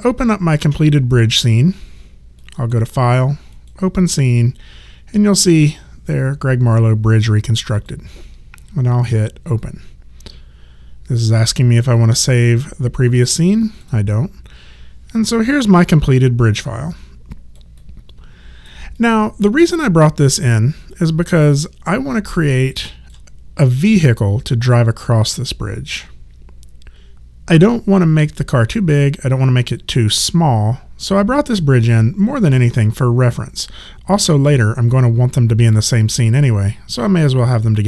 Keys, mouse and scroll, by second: 2.4 click, 7.7 click, 13.6 click, 15.9 alt+click, 17.8 alt+right click, 19.0 alt+click.